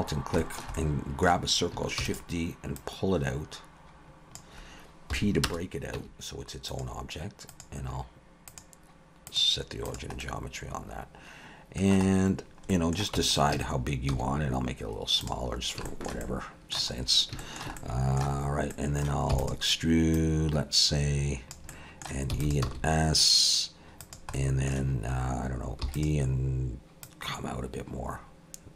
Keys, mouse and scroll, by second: 0.1 scroll down 2, 0.4 shift+middle click, 0.8 middle click, 2.0 shift+d, 2.8 click, 5.9 p, 6.0 Tab, 6.7 click, 7.5 click, 8.5 click, 10.2 middle click, 12.4-12.7 scroll down 3, 12.7 middle click, 13.2 Tab, 13.5 a, 14.1 s, 15.9 shift+middle click, 16.2 middle click, 17.0 scroll up 2, 17.4 shift+middle click, 17.8 middle click, 18.4-19.0 scroll up 2, 18.7 middle click, 19.3 e, 20.1 click, 21.7 middle click, 22.3 e, 22.6 s, 24.3 middle click, 25.8 e, 27.0 click.